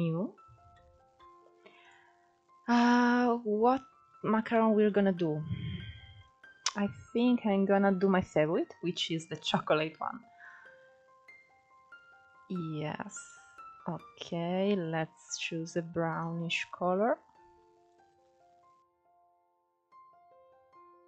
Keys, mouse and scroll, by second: 19.9-21.0 drag.